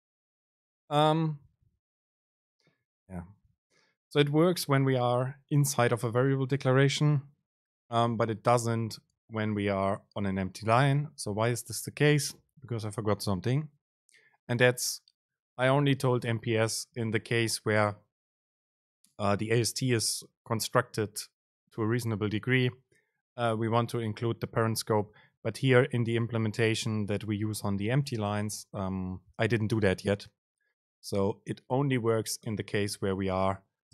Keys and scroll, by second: 10.0 super+space.